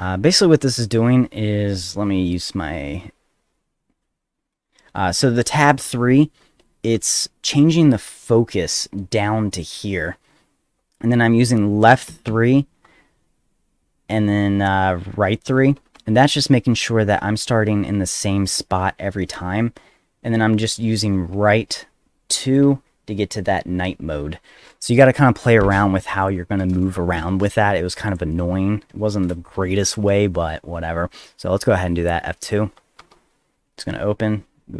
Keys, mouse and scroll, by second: 6.4 Tab, 6.9 Tab, 8.1 Tab, 24.8 click, 26.2 click, 28.1 click, 29.9 click, 33.0 F2.